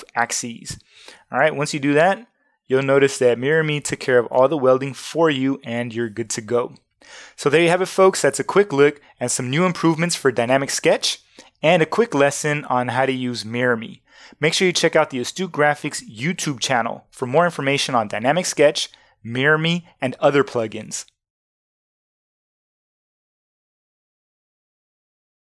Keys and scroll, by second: 1.4 v, 4.5 super+z.